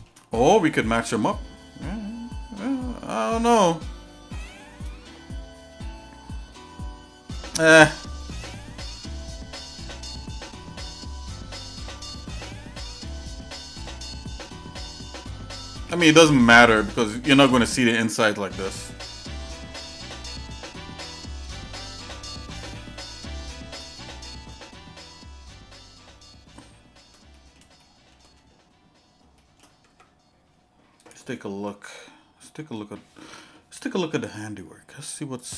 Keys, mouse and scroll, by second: 0.5 scroll up 1, 1.2-5.0 shift+middle drag, 6.5 middle click, 7.5 shift+middle click, 8.2-12.1 shift+middle drag, 12.4 middle click, 13.0 middle click, 13.8-15.1 shift+middle drag, 15.3-15.9 scroll down 3, 16.0-18.5 shift+middle drag, 18.7 scroll up 2, 19.2 shift+middle click, 20.9 Tab, 21.9 scroll down 1, 22.5-23.8 shift+middle drag, 23.9 middle click, 24.5-27.1 shift+middle drag, 27.3 middle click, 27.8 shift+middle click, 29.4 shift+middle click, 29.9 Tab, 31.7 middle click.